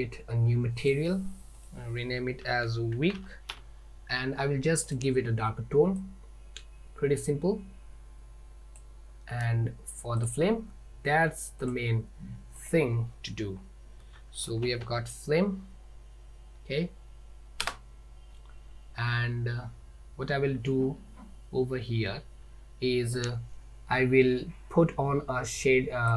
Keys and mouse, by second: 0.9 click, 1.6-4.2 drag, 4.9 click, 10.3 click, 11.7 click, 12.6-18.8 drag.